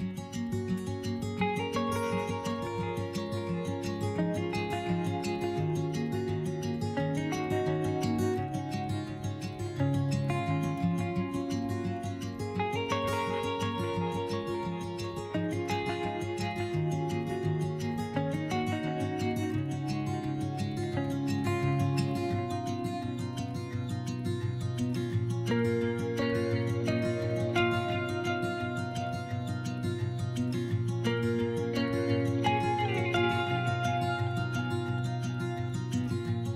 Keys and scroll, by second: 1.2 3, 1.5 s, 5.5 s, 7.2 s, 8.9 s, 13.9 s, 17.2 s, 27.6 3, 31.9 s.